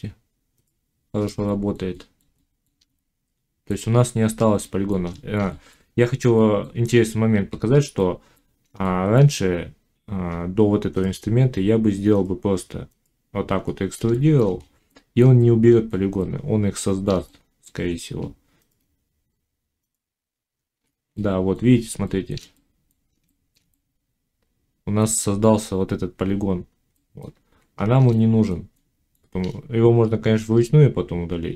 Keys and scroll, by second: 6.8 ctrl+z, 27.3 ctrl+z.